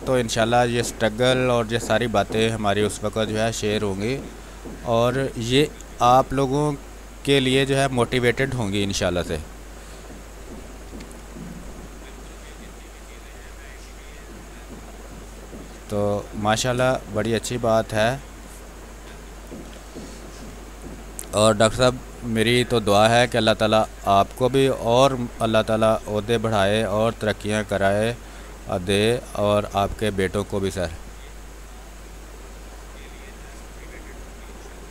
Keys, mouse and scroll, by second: 0.7 click, 1.9 space, 2.3 click, 2.4 space, 3.2-4.7 drag, 4.7 space, 4.9 click, 5.2 space, 6.6-9.8 drag, 9.8 r, 9.9 click, 10.8 b, 11.2 space, 11.4 ctrl+click, 13.2-15.8 drag, 15.8 click, 16.9 click, 17.8 click, 19.4 ctrl+z, 20.8 click, 21.1 click, 21.7 click, 22.0 space, 22.2 click, 22.5 space, 23.5-29.8 drag, 29.8 space, 29.9 click, 30.2 space, 30.9-32.6 drag, 32.6-34.4 drag, 34.4-34.9 drag.